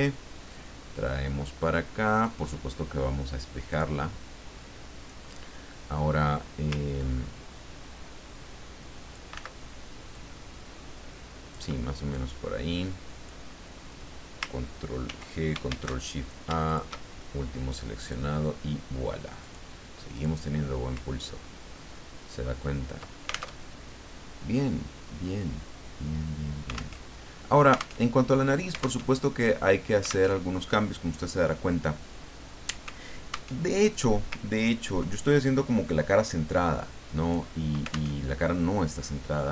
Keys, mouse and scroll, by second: 0.5-3.2 ctrl+drag, 3.7 click, 7.0-9.3 ctrl+drag, 9.3 ctrl+z, 10.1-12.0 ctrl+drag, 12.1-13.8 ctrl+drag, 15.1 ctrl+g, 15.7 ctrl+shift+a, 16.6 shift+click, 18.0 click, 19.4 click, 20.1-21.2 drag, 21.4-22.2 ctrl+scroll up 4, 22.4 ctrl+scroll down 2, 23.6 ctrl+alt+Tab, 27.0 alt+Tab, 28.0 alt+Tab, 29.0 alt+Tab, 30.3 alt+Tab, 33.6 alt+Tab, 34.5 ctrl+scroll down 2, 36.2-37.6 drag, 38.2 alt+Tab.